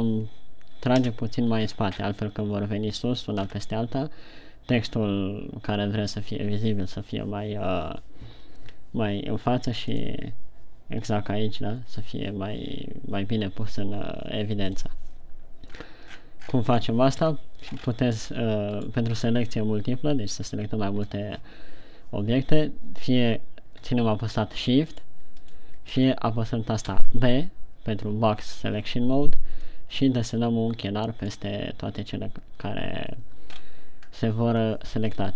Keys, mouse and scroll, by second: 0.1 right click, 1.5 KP_3, 2.0-3.1 scroll up 9, 3.8-5.6 scroll up 4, 16.2-17.5 scroll down 16, 17.5 KP_1, 18.2-18.5 scroll up 7, 19.1 right click, 25.5 shift+right click, 25.9 shift+right click, 26.4-27.2 scroll down 2, 27.2 b, 34.0-34.4 scroll up 3, 34.5 scroll down 1.